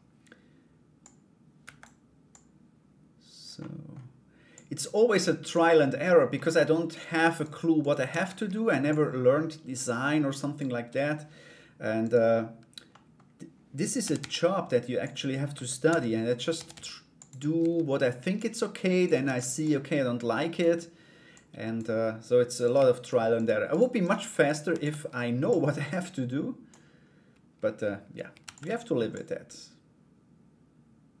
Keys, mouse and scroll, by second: 0.6 click, 1.9-3.0 drag, 3.2 middle click, 4.1-5.1 drag, 5.3 middle click, 5.9 middle click, 6.5 right click, 6.9 shift+right click, 7.4 shift+right click, 7.7 shift+d, 8.4-10.1 drag, 11.6 right click, 12.5 middle click, 15.1 Tab, 15.4 a, 16.1 a, 16.3 s, 17.2 Tab, 17.9 click, 18.8 shift+d, 19.2 click, 20.9 click, 22.2 right click, 22.6 shift+right click, 22.9 shift+right click, 23.3 shift+right click, 23.6 shift+right click, 23.9 shift+right click, 24.3 shift+d, 25.1-26.2 drag, 28.0 shift+d, 28.7-30.9 drag.